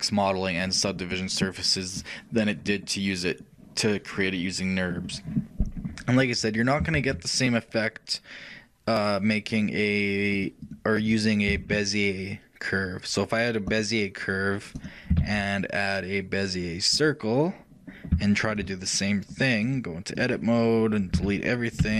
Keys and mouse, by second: 6.8-8.5 shift+drag, 7.0 shift+a, 10.4-12.5 drag, 11.7 shift+a, 14.9-16.7 shift+drag, 15.1 shift+a, 15.3 shift+a, 18.0 shift+middle click, 18.4-20.0 middle drag, 19.5-21.7 shift+drag, 21.3 shift+a.